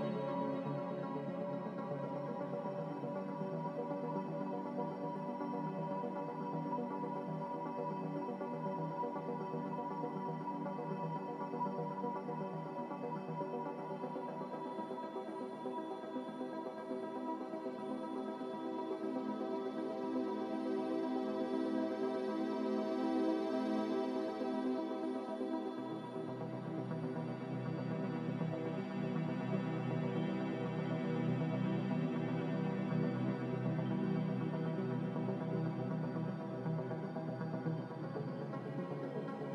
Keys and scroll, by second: 3.1 Escape.